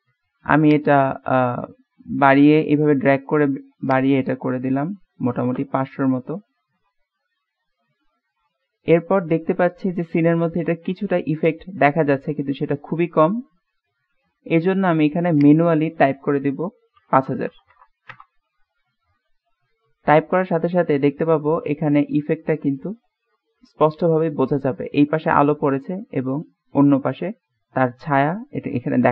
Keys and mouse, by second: 0.6-2.4 drag, 4.0-7.9 drag, 8.5 middle click, 9.8-10.6 middle drag, 11.3-14.4 middle drag, 15.5-18.8 drag, 17.6 KP_0, 19.2-25.2 middle drag, 25.8-26.6 middle drag.